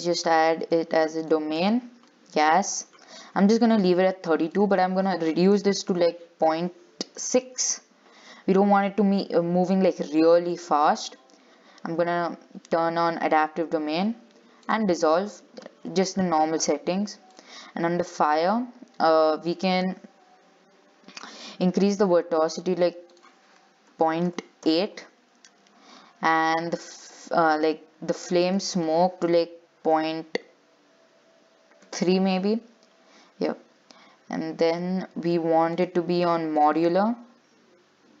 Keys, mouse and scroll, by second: 0.1-2.8 drag, 2.8-3.6 scroll down 2, 3.6-4.7 scroll down 1, 4.7-7.8 drag, 8.4-8.9 scroll down 6, 10.8 click, 11.2-13.4 scroll down 2, 13.4-14.3 scroll down 8, 15.0 click, 17.5-31.8 drag, 33.1-34.2 scroll down 8, 34.2-35.3 scroll up 1, 35.3-35.6 scroll down 1, 35.9-37.6 drag, 37.6-38.2 scroll down 2.